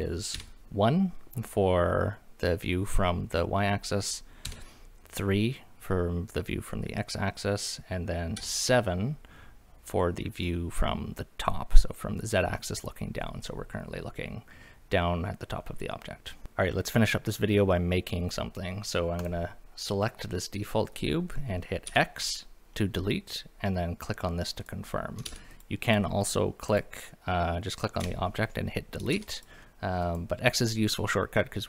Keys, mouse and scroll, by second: 0.3 KP_1, 4.5 KP_3, 8.4 KP_7, 13.5-15.6 middle drag, 16.4 shift+middle click, 16.4 scroll up 2, 19.2 click, 21.9 x, 25.3 ctrl+z, 25.5 click, 25.9 click, 26.7 click, 28.0 Delete, 29.1 ctrl+z, 29.4 click, 29.6 middle drag, 30.0 click.